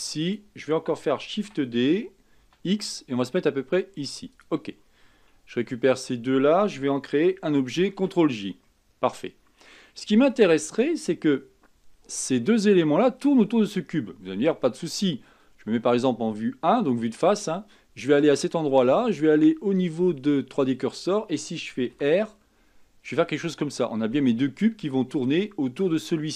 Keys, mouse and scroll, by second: 1.6 shift+d, 6.1 shift+click, 8.0 ctrl+j, 8.9-13.9 middle drag, 15.8 KP_1, 18.6-21.6 drag, 22.1 r.